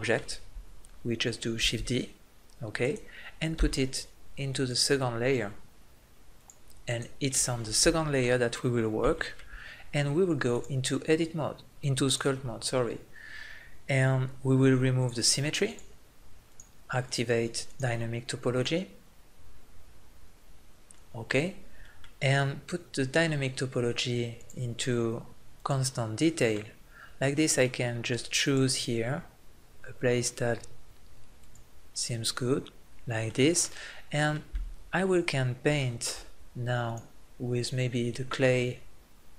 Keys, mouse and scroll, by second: 1.7 shift+d, 3.5 m, 6.4 click, 7.3-8.3 middle drag, 8.4 right click, 24.4-26.2 drag, 26.4 middle click, 28.4 click, 30.1-31.4 drag, 36.9-38.8 drag.